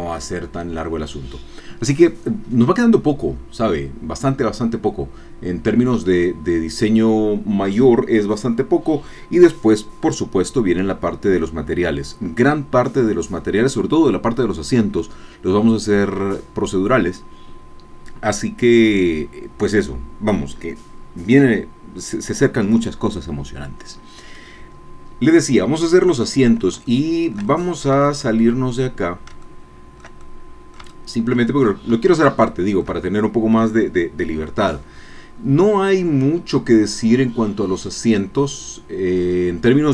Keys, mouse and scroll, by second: 26.2-26.5 scroll down 2, 26.8-28.9 shift+drag, 29.0 shift+scroll down 2, 29.4 shift+click, 30.2-31.4 shift+drag, 31.5 shift+scroll up 2, 32.1-35.9 shift+drag.